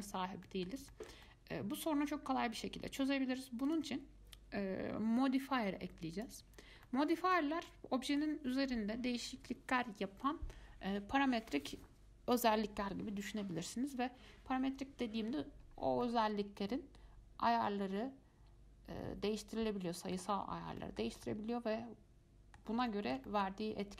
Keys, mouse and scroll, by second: 0.2-0.6 scroll down 2, 0.6-3.0 middle drag, 3.0 Tab, 3.5 Tab, 3.9 click, 6.3 click, 7.1-10.9 middle drag, 15.7-16.2 scroll up 2, 16.2-19.2 middle drag, 21.0-23.9 shift+middle drag.